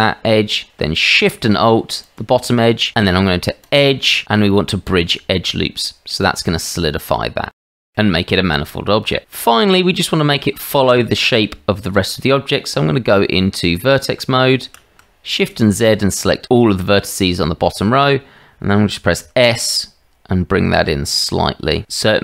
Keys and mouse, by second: 3.7-5.0 drag, 6.0-7.6 middle drag, 9.4 click, 12.2 Tab, 14.6 shift+z, 15.5 click, 17.3 shift+z, 19.2 s.